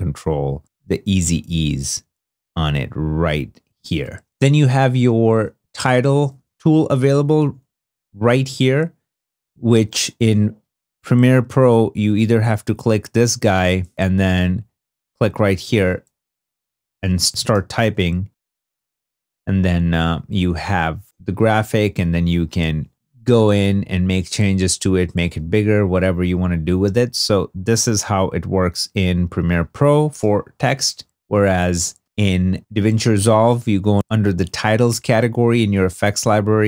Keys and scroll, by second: 6.8 i, 7.7 2, 9.4 super+Tab, 14.9-18.3 typing, 31.2 super+Tab.